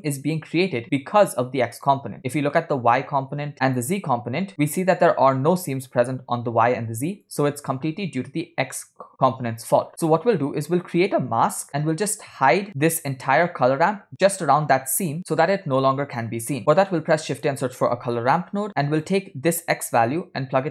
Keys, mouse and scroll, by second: 2.5 ctrl+shift+click, 7.3 ctrl+shift+click, 12.7 middle click, 12.7 scroll down 2, 13.2 click, 16.6 middle click, 16.6 scroll down 2, 16.9 shift+a, 20.1-20.7 drag.